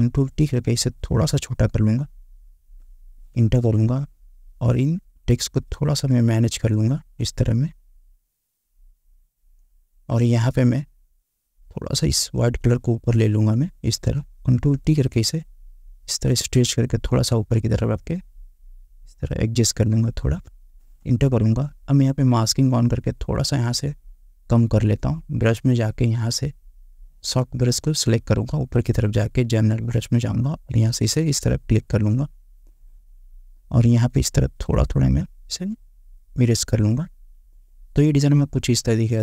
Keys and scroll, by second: 0.1 ctrl+t, 3.5 Return, 14.7 ctrl+t, 21.2 Return.